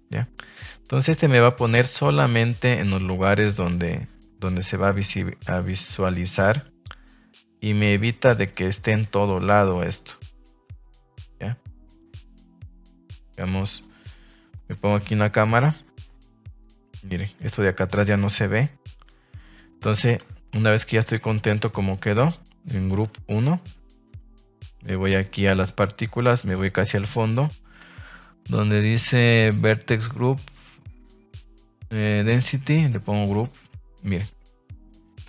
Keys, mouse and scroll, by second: 0.1 click, 13.3 Escape, 13.4 middle click, 14.4 middle click, 14.6 Tab, 15.3 KP_0, 15.7 Tab, 20.2 Tab, 21.2-21.7 drag, 25.7 click, 29.6 click, 32.2-33.3 drag.